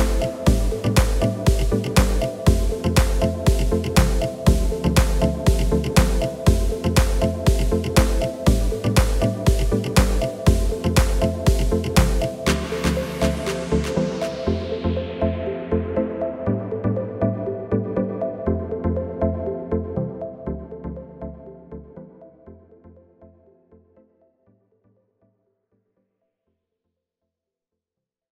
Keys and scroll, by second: 2.4 KP_1, 11.3 Tab, 13.5 a, 22.1 KP_1.